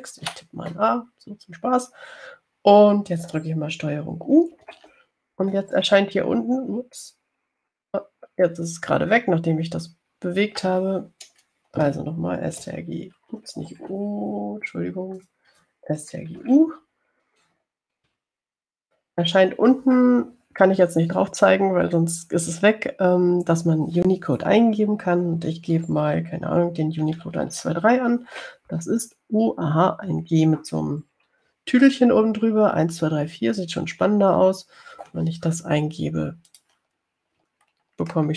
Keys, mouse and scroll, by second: 1.5 a, 5.8 ctrl+u, 13.9 ctrl+o, 16.4 click, 17.6 ctrl+u, 19.3 ctrl+u, 28.0-29.2 typing, 33.1 4, 35.2 Return, 37.8 click.